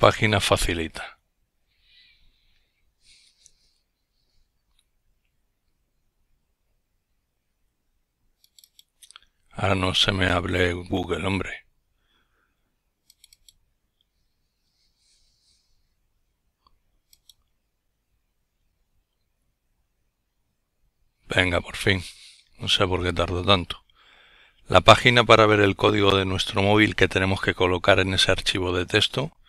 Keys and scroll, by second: 21.4 typing, 26.0-26.7 typing.